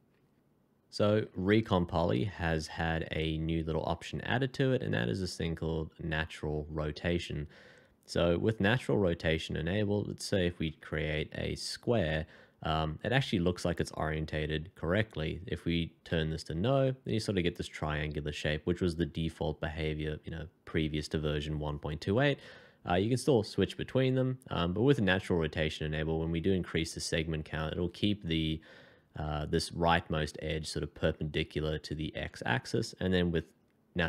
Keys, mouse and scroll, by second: 1.2 shift+2, 10.0 alt+scroll up 1, 16.1 r, 23.0 r, 23.4 r, 23.7 r, 26.3-26.6 alt+scroll up 1, 29.3 \, 32.4 \.